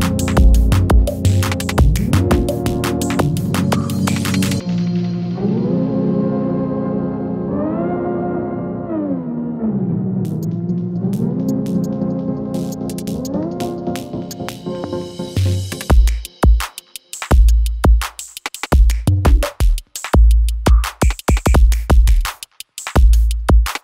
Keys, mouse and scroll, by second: 0.0-1.1 typing, 1.8 click, 18.6 F4, 19.4 click, 22.9 Page_Down.